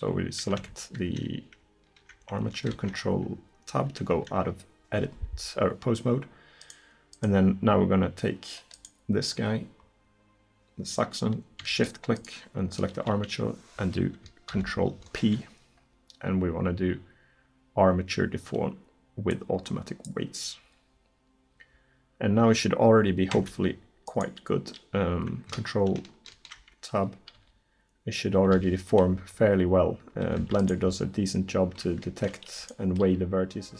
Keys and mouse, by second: 0.6 Tab, 2.8 ctrl+Tab, 6.7-14.5 right drag, 14.5 ctrl+p, 23.4 Tab, 26.4 ctrl+Tab, 27.4 r, 30.6 right click.